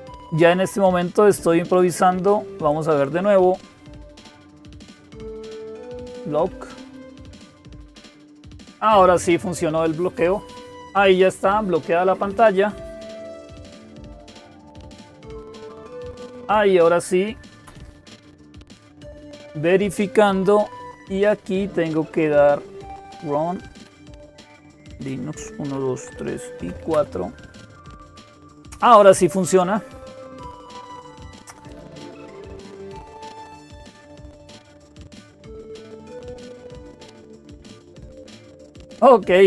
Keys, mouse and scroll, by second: 1.6 click, 2.5 click, 31.5 click, 34.7-36.6 drag.